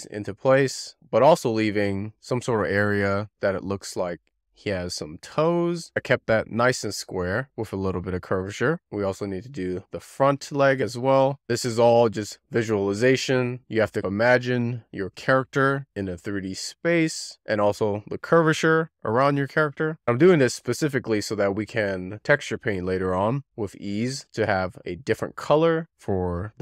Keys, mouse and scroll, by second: 0.0 click, 0.2-0.5 scroll up 3, 0.3 middle click, 0.5 scroll down 2, 0.7 click, 0.8 click, 1.0 click, 1.0 z, 1.2-2.2 click, 1.6 click, 1.8 shift+middle click, 1.9 click, 2.2 middle click, 2.7 click, 2.8 click, 3.0 scroll up 2, 3.2 click, 3.3 middle click, 3.9-5.3 click, 4.4 click, 5.0 click, 5.5 middle click, 5.9 scroll up 5, 5.9 scroll down 2, 6.2 shift+middle click, 6.6 click, 6.7 alt+z, 6.9 click, 7.1 alt+z, 7.2 scroll up 1, 7.3 alt+z, 7.4 click, 7.5 click, 7.8 click, 7.8 alt+z, 8.0 click, 8.2 click, 8.4 click, 8.6 z, 8.7 middle click, 8.8 scroll down 3, 8.9 shift+middle click, 9.0 scroll up 4, 9.2 shift+middle click, 9.4 click, 9.5 shift+middle click, 9.6 scroll up 3, 10.0 click, 11.4 click, 11.8-12.3 click, 12.3 click, 12.5 alt+z, 12.8 shift+middle click, 13.2 shift+middle drag, 13.7 click, 14.0 shift+middle click, 14.1 click, 14.4 shift+middle click, 14.6 click, 15.0-15.5 scroll down 4, 15.3 click, 15.5 click, 15.6 middle click, 15.8 alt+middle click, 15.9 click, 16.0 scroll up 1, 16.2 click, 16.6 click, 17.3 scroll up 2, 17.5 right click, 18.1 click, 18.9 k, 19.0 click, 19.1 x, 19.3 middle click, 19.6 middle click, 19.8 scroll up 1, 20.0 middle click, 20.3-20.8 scroll down 1, 20.9 alt+middle click, 21.6 z, 22.3 z, 22.5 z, 22.7 scroll down 2, 22.7-23.1 scroll up 1, 23.1 scroll down 1, 23.2 click, 23.4 scroll up 2, 23.6 z, 23.8 scroll down 1, 23.9 drag, 24.0 shift+middle click, 24.1-25.2 scroll up 2, 25.2 shift+middle click, 26.1-26.5 scroll down 1.